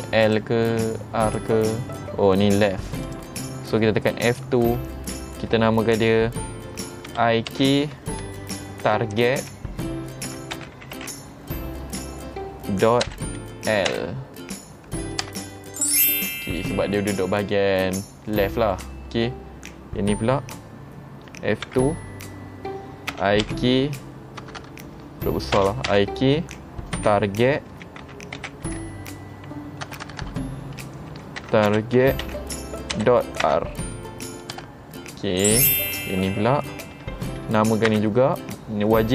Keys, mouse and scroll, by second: 0.3 click, 1.3 click, 3.1 click, 4.7 F2, 16.7 click, 18.5 middle click, 21.8 F2, 24.7 BackSpace, 30.1 BackSpace, 35.7 click, 38.0 F2.